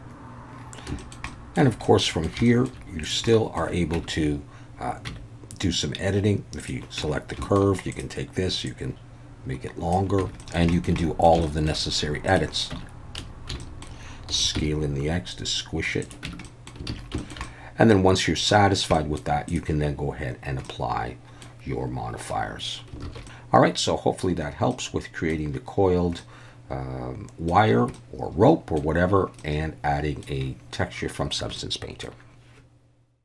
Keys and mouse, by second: 1.0 alt+middle drag, 1.3 alt+middle drag, 1.8-2.3 middle drag, 2.5 shift+middle drag, 3.0 drag, 3.3 middle drag, 4.0 Tab, 5.1 Tab, 6.6 click, 7.0 Tab, 7.4 shift+middle click, 8.0 click, 8.7-9.9 drag, 10.2 Tab, 10.4 alt+a, 10.4 middle click, 10.7 shift+middle click, 11.0 middle drag, 11.4 shift+middle click, 12.7 Tab, 13.2 a, 13.6 shift+middle click, 14.3 s, 14.6 x, 16.0 click, 16.3 Tab, 16.5 middle drag, 16.9 alt+a, 17.2 shift+middle click, 17.4-18.5 middle drag, 19.0 middle click, 20.7-21.4 middle drag, 23.1 alt+a, 23.2-24.2 middle drag, 24.7-25.3 middle drag, 26.2-27.5 middle drag, 27.9-28.8 middle drag, 29.4-30.3 middle drag, 31.6-32.1 middle drag.